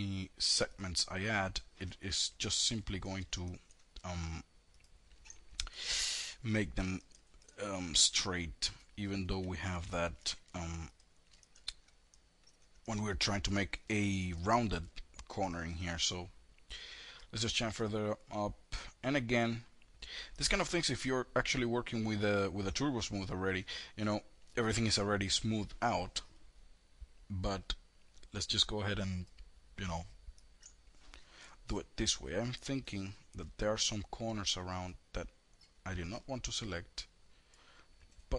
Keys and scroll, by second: 1.7 ctrl+z, 8.8 ctrl+z.